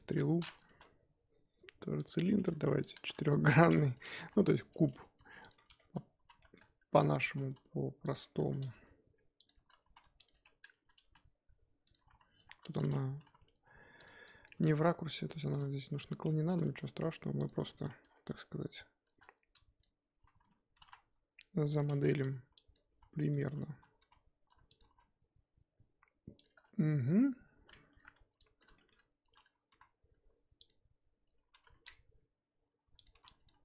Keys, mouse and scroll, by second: 0.0 KP_1, 0.7 shift+a, 2.8 click, 3.4-4.2 scroll down 6, 4.2 g, 5.0 g, 5.5-6.1 scroll up 9, 6.1 z, 6.4 shift+middle click, 6.6 scroll up 1, 6.8 Tab, 7.2 s, 8.2 scroll up 3, 8.4 Tab, 8.7 g, 9.5 Tab, 9.8 s, 10.3 g, 10.7 Tab, 11.0 g, 11.9 Tab, 12.5 1, 12.6-13.1 drag, 13.1 g, 14.2 click, 14.5 g, 15.3-15.9 shift+middle drag, 15.9-16.4 scroll down 3, 16.4 a, 16.6 s, 17.5 scroll, 17.6-18.0 scroll up 3, 18.0-19.0 scroll down 4, 19.0 Tab, 19.2-19.5 scroll, 22.0 shift+middle click, 22.5 click, 22.9 s, 23.6 a, 24.0 s, 24.8 s, 26.5 Tab, 27.7 scroll up 2, 27.9 Tab, 28.4-28.7 drag, 28.7-29.7 shift+middle drag, 29.7 e, 31.7 ctrl+r, 33.1 3, 33.2 click.